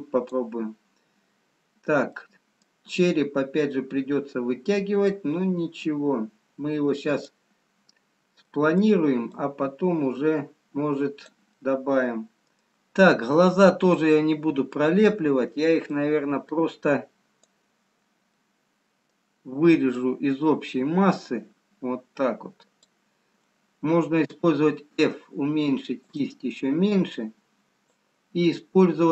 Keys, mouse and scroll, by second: 4.1 middle click, 4.1 scroll down 1, 5.7 click, 8.3 scroll down 1, 9.0 middle click, 9.5 click, 11.8 middle click, 12.8 middle click, 12.8 scroll up 2, 14.0-14.8 scroll down 1, 16.1 click, 19.1 middle click, 20.3 click, 27.2 click.